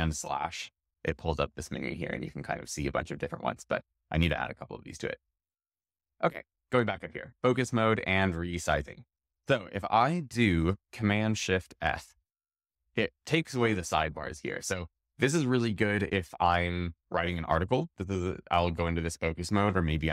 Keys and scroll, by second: 11.7 shift+super+f.